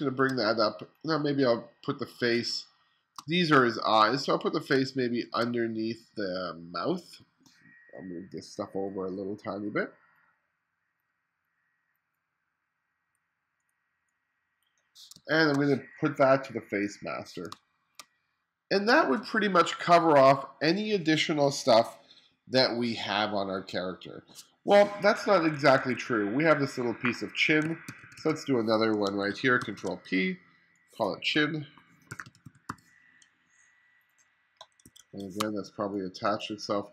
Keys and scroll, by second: 2.5 space, 4.8 space, 15.2 space, 17.6 space, 25.3 2, 27.4-28.4 typing, 29.6 super+r, 31.9-33.2 typing, 34.9 1, 35.4 space.